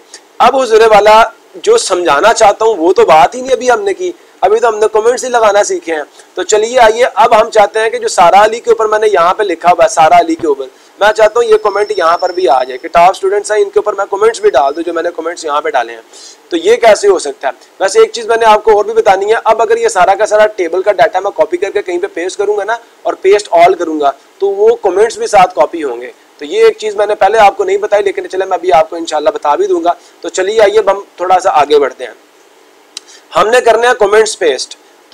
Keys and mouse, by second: 8.1 click, 10.9 click, 11.7 click, 25.9 click.